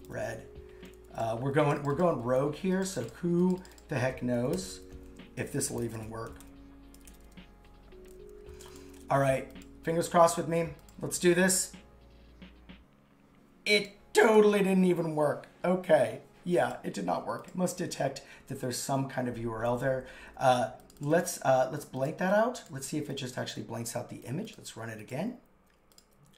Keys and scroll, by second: 5.5 shift+3, 17.8 super+z, 22.8 super+x.